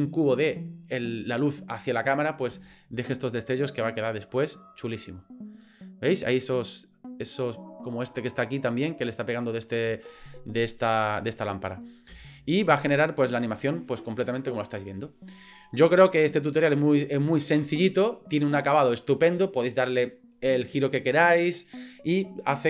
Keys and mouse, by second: 3.5-8.2 drag, 11.9 click, 12.2 space.